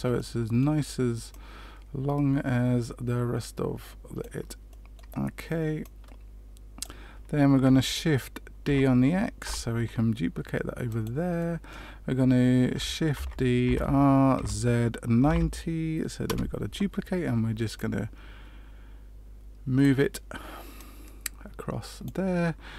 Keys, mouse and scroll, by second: 0.1 middle click, 1.2 click, 4.6 middle click, 5.8 click, 8.6 shift+d, 11.3 middle click, 13.1 shift+d, 17.7 click.